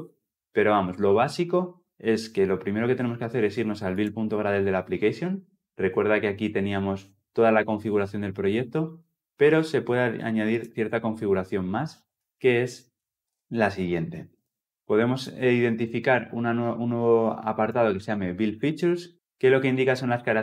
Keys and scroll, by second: 14.6 Return.